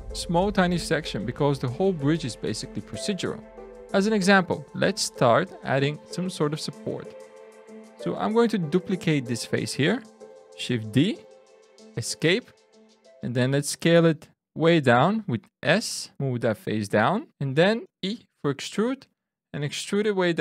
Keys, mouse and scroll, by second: 2.6 middle click, 4.3 click, 4.8 Tab, 5.3-5.6 scroll up 2, 6.1 shift+middle click, 7.1 shift+scroll down 1, 8.1 click, 11.0 shift+d, 12.0 Escape, 13.3 s, 16.2 click, 17.2 middle click, 17.9 e, 19.8 click.